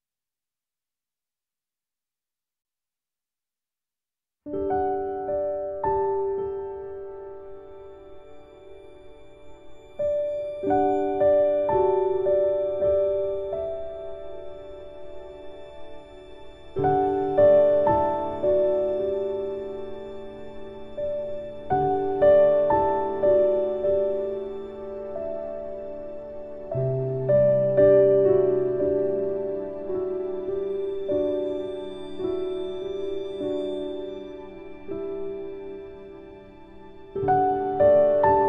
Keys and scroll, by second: 5.4 ctrl+k.